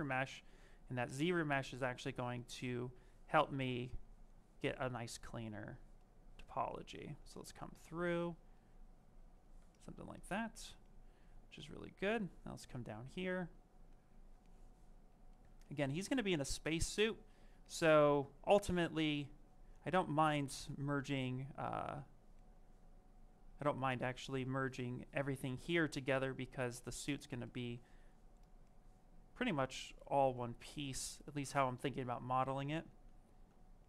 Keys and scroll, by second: 33.2 s.